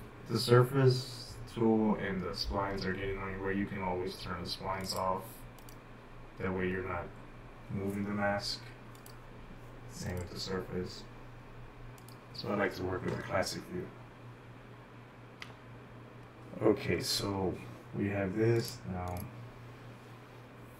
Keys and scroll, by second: 16.4 shift+8.